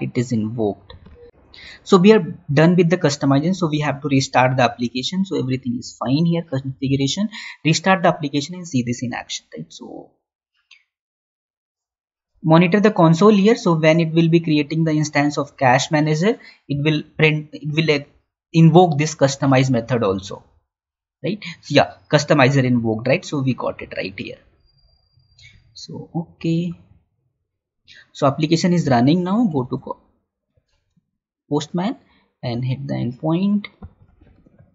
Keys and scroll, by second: 29.9 alt+Tab.